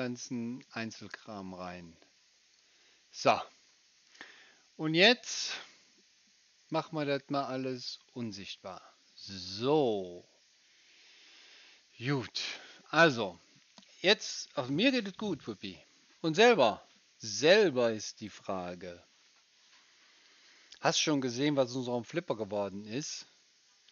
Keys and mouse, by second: 0.4-1.4 middle drag, 1.4-2.5 right drag, 2.5 middle click, 2.6-10.9 right drag, 6.7 click, 7.9 click, 10.9 middle click, 11.2 click, 11.2 right click, 11.3 middle click, 11.4 click, 11.4 right click, 11.5 middle click, 11.6-23.9 drag, 11.6-23.9 right drag.